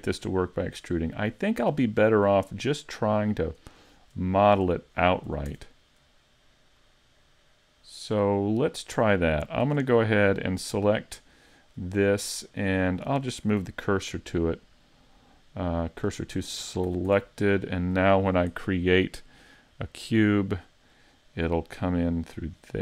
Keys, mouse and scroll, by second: 1.1 middle click, 3.2-4.3 scroll down 6, 4.9-5.5 scroll up 5, 5.5 Tab, 6.8 middle click, 9.7 Tab, 10.4 right click, 11.7 middle click, 13.6 shift+s, 16.3-16.9 scroll down 2, 16.9 a, 17.1 Tab, 17.8 middle click, 19.7 click, 20.9 middle click, 22.7 click.